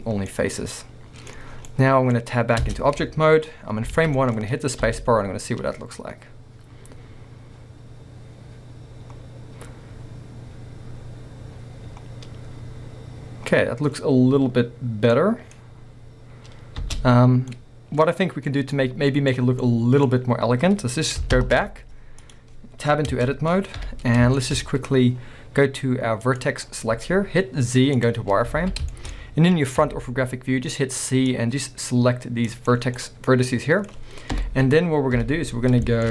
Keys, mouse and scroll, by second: 0.2 scroll down 2, 0.3-4.1 middle drag, 1.5 scroll down 1, 1.6 scroll up 1, 2.7 Tab, 3.9 alt+a, 4.5-4.8 scroll down 1, 4.8 space, 17.0 space, 17.2 scroll down 1, 17.5 middle click, 18.5 scroll down 1, 18.7 middle click, 19.3 scroll down 1, 19.7-22.2 middle drag, 20.1-21.5 scroll up 2, 21.5 shift+Left, 22.2 click, 23.1 b, 23.8 KP_1, 24.4-26.3 shift+middle drag, 24.6-25.5 scroll up 2, 25.5-26.3 scroll up 1, 26.3 click, 28.3 scroll up 2, 28.6 a, 28.9-29.8 shift+middle drag, 29.8-32.7 drag, 32.7 right click, 32.9 scroll down 2, 33.0-33.6 middle drag, 35.2 KP_1, 35.7-36.1 shift+middle drag, 35.7 scroll down 1.